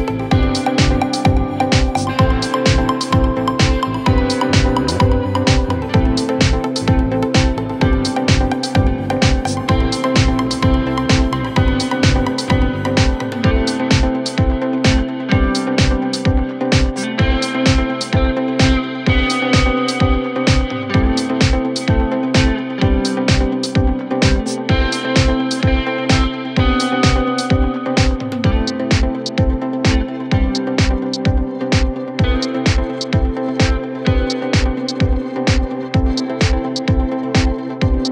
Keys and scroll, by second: 11.8 Delete, 17.6 F3, 17.9 Escape, 20.5 shift+F2, 20.7 Escape, 36.6 F3, 36.7 Escape, 37.9 Escape.